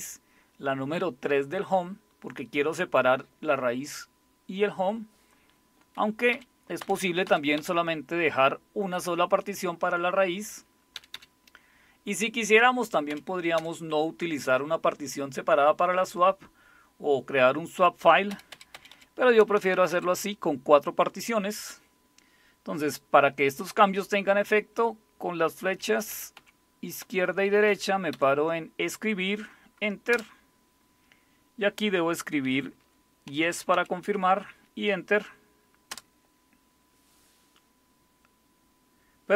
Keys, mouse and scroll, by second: 6.3 Up, 6.8 Up, 7.3 Down, 7.6 Up, 10.9 Down, 11.1 Down, 13.1 Up, 13.6 Down, 18.3 Up, 18.5 Up, 18.7 Up, 18.9 Up, 19.4 Down, 19.6 Down, 19.7 Down, 19.9 Down, 25.7 Left, 26.1 Left, 26.4 Left, 27.0 Right, 27.2 Right, 27.4 Right, 27.7 Right, 30.1 Return, 33.0-34.2 typing, 35.9 Return.